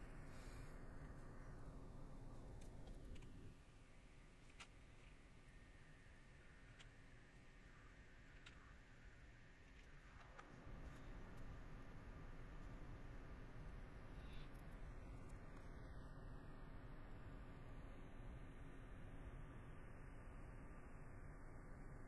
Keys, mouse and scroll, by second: 1.3 middle click, 4.5 middle click, 5.0 middle click, 6.6 middle click, 11.6 middle click, 12.6 middle click, 13.6 middle click, 14.5 scroll, 14.8 middle click, 17.3 middle click, 18.6 middle click.